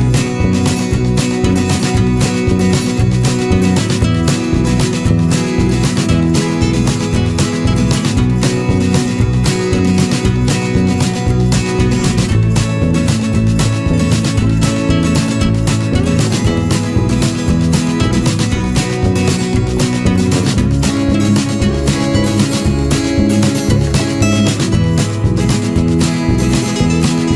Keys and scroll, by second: 2.2 ctrl+=, 2.3 ctrl+space, 6.9 ctrl+-.